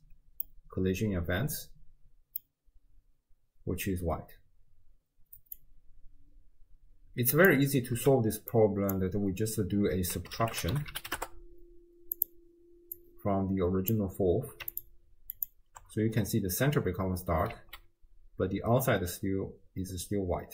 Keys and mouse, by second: 0.5-2.5 drag, 5.7-7.7 drag, 8.0 x, 8.5-12.4 drag, 13.0-14.0 drag, 14.8 ctrl+shift+click, 15.4 ctrl+shift+click, 17.6 alt+z.